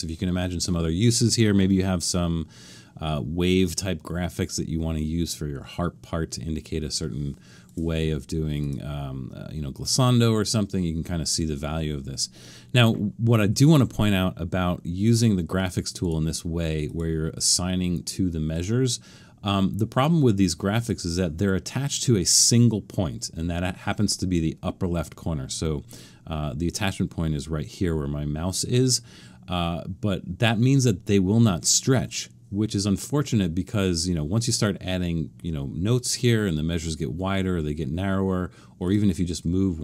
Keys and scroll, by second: 8.0 Right, 32.0 Escape.